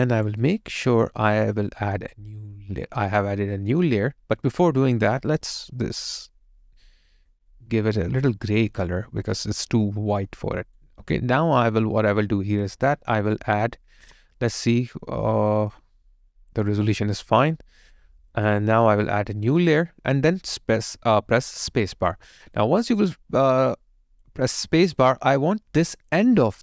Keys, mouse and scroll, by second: 0.4 alt+right click, 0.7 alt+click, 21.6 space, 22.6 alt+click, 24.4 alt+right click, 25.9 alt+right click, 26.1 alt+click.